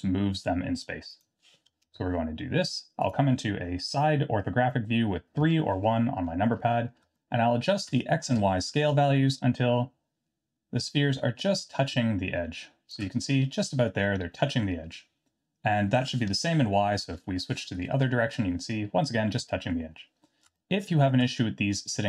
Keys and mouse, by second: 1.2-2.4 drag, 5.4 KP_3, 7.1-7.8 shift+drag, 9.1-12.9 shift+drag, 17.0 KP_1, 20.6-21.0 shift+middle drag.